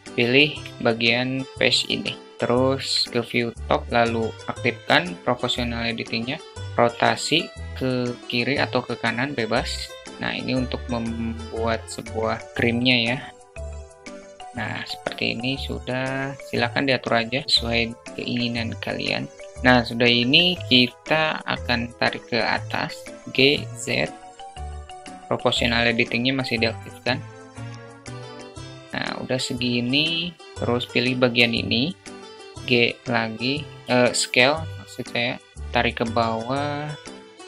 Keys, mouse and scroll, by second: 0.1 3, 1.9 alt+middle click, 6.6 r, 14.4 alt+middle click, 16.1-17.4 alt+middle drag, 17.7 Tab, 19.5 `, 22.4 g, 28.9 alt+middle click, 30.9 click, 31.8 alt+middle click, 32.2 s, 33.2 s, 35.4 click, 36.1 ctrl+z.